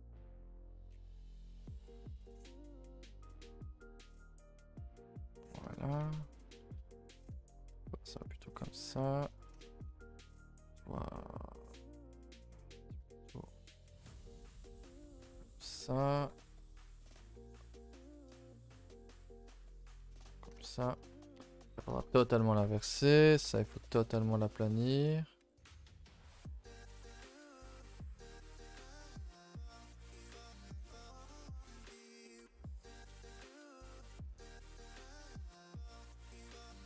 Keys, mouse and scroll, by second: 1.4 r, 2.0 s, 4.5 click, 4.6 g, 6.4 z, 6.6 shift+middle click, 7.0 click, 7.5 shift+click, 7.8 g, 8.9 g, 9.6 shift+middle click, 9.9 a, 10.1 a, 10.4 c, 13.0 g, 15.2-17.3 typing, 18.4 a, 18.6 a, 18.8 click, 19.2 g, 20.6 shift+middle click, 20.9-21.2 scroll up 1, 21.6-24.7 typing, 22.0 shift+middle click, 26.2 c, 27.8 r, 28.4 g, 29.4 click, 29.8 g, 30.9 click, 31.3-32.2 scroll up 1, 32.2 c, 32.6 g, 33.3 r, 34.4 g, 35.4 click, 35.7 shift+click, 36.0 g.